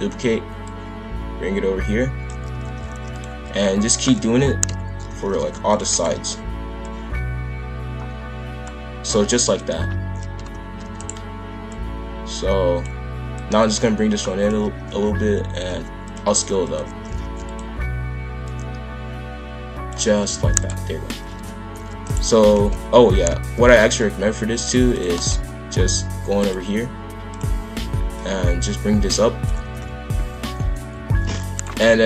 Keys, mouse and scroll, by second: 0.6 click, 2.5 shift+f, 3.9 shift+click, 4.6 ctrl+l, 5.0 shift+f, 5.8 shift+d, 6.8 click, 9.4 click, 10.3 ctrl+l, 10.8 shift+d, 11.7 click, 13.3 click, 14.7 shift+f, 16.6 click, 16.9 shift+f, 18.4 click, 20.1 shift+f, 21.3 ctrl+l, 21.8 shift+d, 22.5 ctrl+z, 23.0 shift+f, 26.4 click, 28.1 click, 29.6 shift+f.